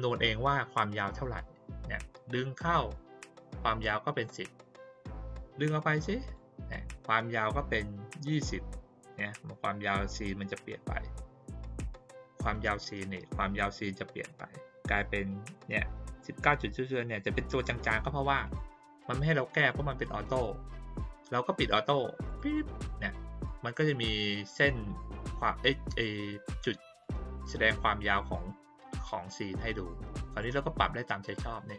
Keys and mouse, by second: 2.2-2.8 drag, 5.4 click, 12.5 click, 17.8 click, 18.4 click, 18.9 click, 19.5 click, 22.2 click, 22.4 click, 27.0-30.4 drag, 31.3-31.7 drag.